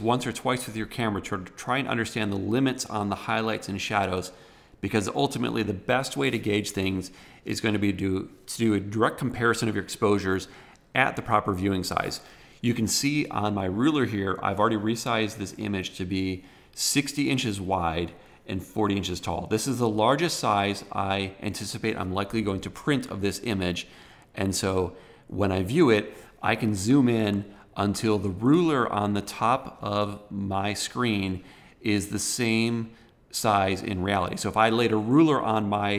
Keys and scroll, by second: 26.7 super+=.